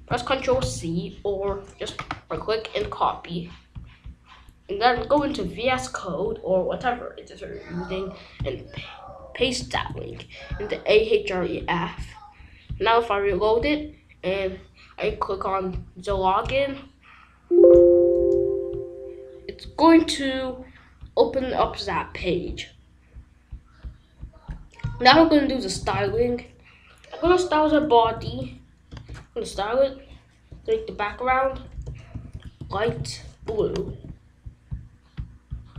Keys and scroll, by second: 0.3 ctrl+c, 9.1 ctrl+v, 9.7 ctrl+s, 18.1 Return, 25.9 ctrl+s, 27.7-28.7 typing, 28.9 Return, 30.5 b, 31.2 Down, 31.7 Return, 31.8-33.3 typing, 33.4 Return, 33.9 ctrl+s.